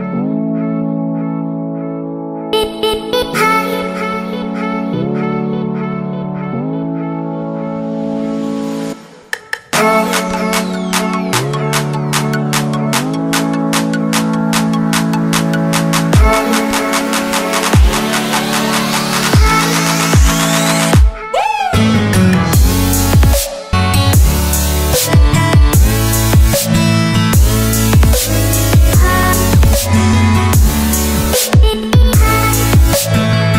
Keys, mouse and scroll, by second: 0.6 right click, 1.6 click, 15.5-16.6 typing, 17.8 click, 18.7-21.8 typing, 20.1 click, 22.5 click.